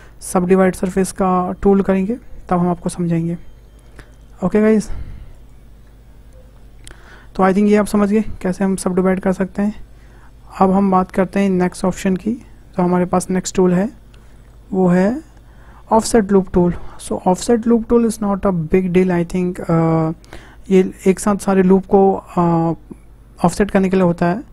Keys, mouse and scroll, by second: 5.3 click, 6.9 Tab, 9.9 Delete, 10.8 shift+a, 12.8 Tab, 14.9-18.0 drag.